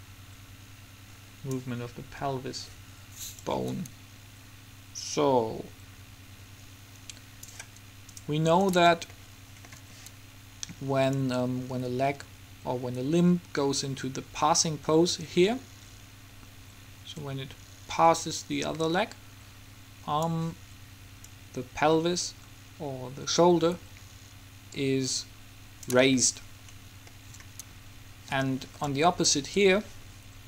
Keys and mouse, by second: 3.5-5.3 drag, 11.3 middle click, 11.5-13.3 drag, 21.4-23.2 drag, 26.5 middle click.